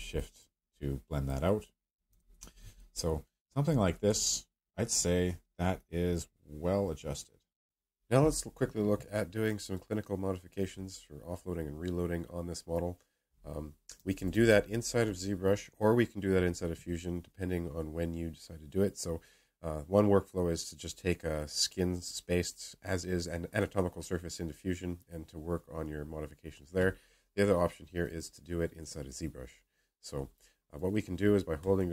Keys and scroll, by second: 13.9 ], 14.1 ], 14.2 ], 14.4 ].